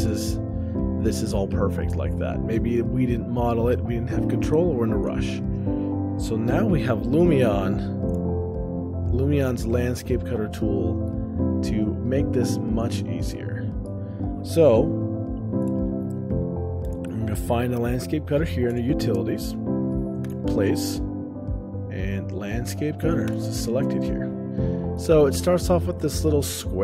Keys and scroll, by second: 8.5 o, 14.3 o, 20.1-20.8 typing, 25.0 shift+space.